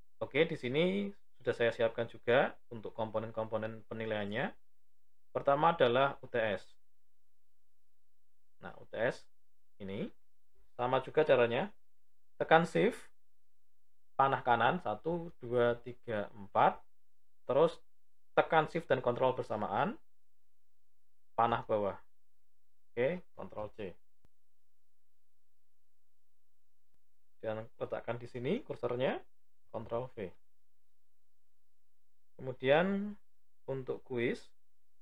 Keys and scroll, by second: 12.3 shift+Right, 18.3 ctrl+shift+Down, 23.5 ctrl+c, 29.6 ctrl+v.